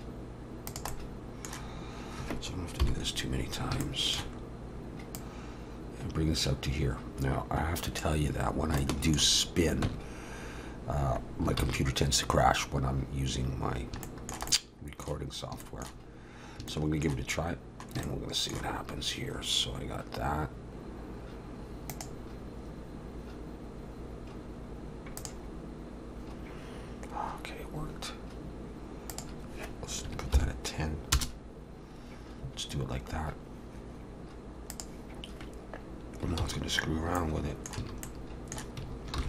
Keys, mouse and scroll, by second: 0.9 middle click, 2.8 KP_7, 3.8 shift+middle click, 4.4-5.0 scroll up 1, 5.2 click, 5.2-5.9 scroll up 1, 8.5 scroll down 2, 8.8 shift+middle click, 9.9 Tab, 11.6 ctrl+s, 13.7 scroll down 1, 14.0 shift+middle click, 14.6 shift+middle click, 15.3 scroll up 1, 15.6 shift+middle click, 16.1-16.6 scroll up 1, 16.7 shift+middle click, 17.7 scroll up 1, 18.0 shift+middle click.